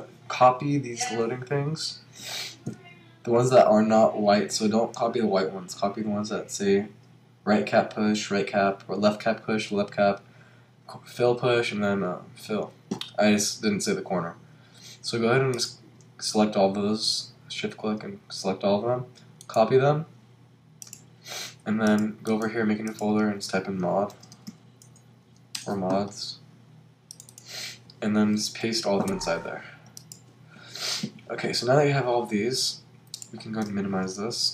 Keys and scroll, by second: 24.1 shift+m, 25.6 Return, 28.6 super+v, 34.1 super+m.